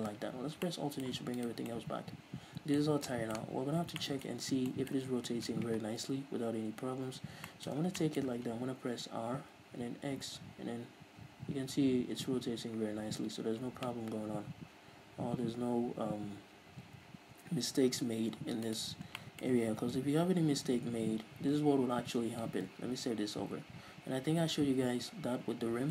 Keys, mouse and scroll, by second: 0.8 alt+h, 1.7 right click, 2.0-19.1 middle drag, 3.1 scroll up 2, 4.1 scroll down 2, 4.6-5.0 scroll up 2, 5.4-6.4 scroll down 2, 6.4 KP_3, 7.5 scroll up 2, 8.1 scroll down 2, 9.5 r, 19.1 right click, 19.2 scroll up 1, 19.6 shift+middle click, 20.5 Tab, 21.5 a, 22.6 Tab, 23.1 ctrl+s, 25.0 Tab, 25.8 middle click.